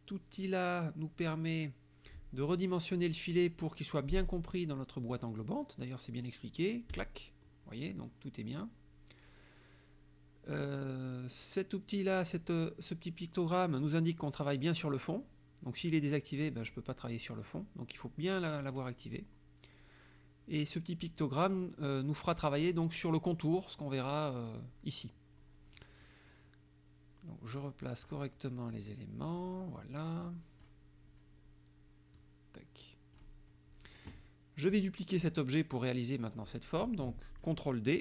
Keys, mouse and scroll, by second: 7.0 click, 15.9 click, 16.7 click, 18.7 click, 27.6 click, 28.8 click, 30.3 click, 32.2-33.4 drag, 34.8 click, 36.5 middle click, 37.4 click.